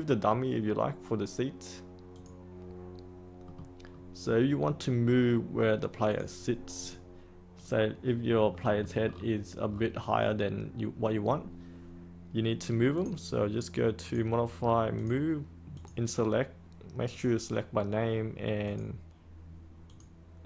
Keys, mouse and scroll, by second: 3.4 middle click, 6.0 click, 8.5 middle click, 9.0-12.1 scroll down 1, 12.9-16.7 drag.